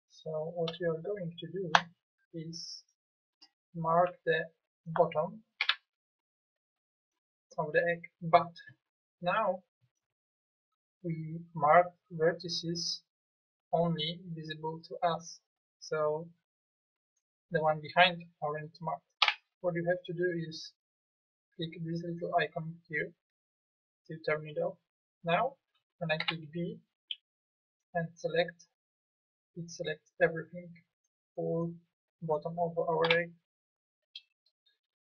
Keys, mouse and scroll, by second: 5.6 b, 16.4 middle click, 19.2 KP_1, 26.2 b, 33.1 KP_1.